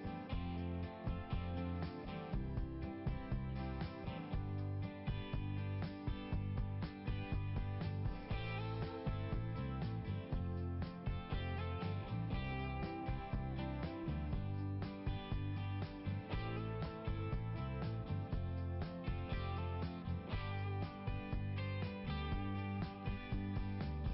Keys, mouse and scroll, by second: 3.0 scroll down 1, 6.0 right click, 7.4 click, 8.5 right click, 9.4 click, 14.5 click, 16.5 click, 20.5-20.9 scroll down 1, 23.5 click.